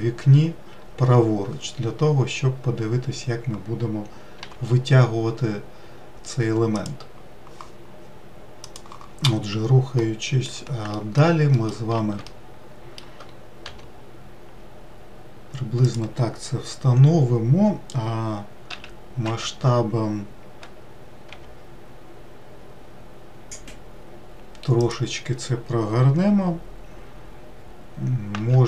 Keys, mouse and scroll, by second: 4.0 g, 9.4-10.5 middle drag, 11.0 alt+middle click, 11.7-13.1 shift+middle drag, 13.1 g, 18.2 s, 27.8 s.